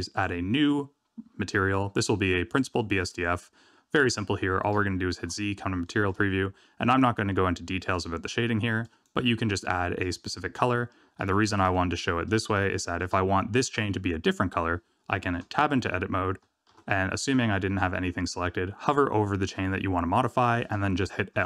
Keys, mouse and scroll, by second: 0.0 click, 2.7 middle click, 4.7 z, 5.8 shift+middle click, 7.9 click, 10.5 middle click, 11.6 shift+middle click, 11.7 middle click, 12.6 shift+middle click, 15.5 Tab, 16.7 alt+a, 21.3 l.